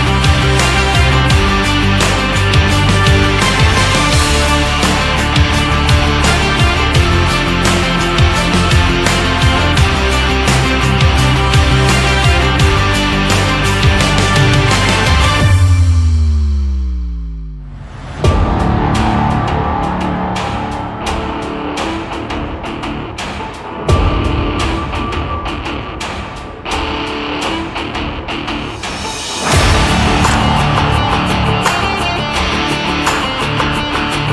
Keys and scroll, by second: 3.2 ctrl+c, 3.4 ctrl+f, 25.2 ctrl+c, 25.5 ctrl+f, 31.3 ctrl+c, 31.5 ctrl+f.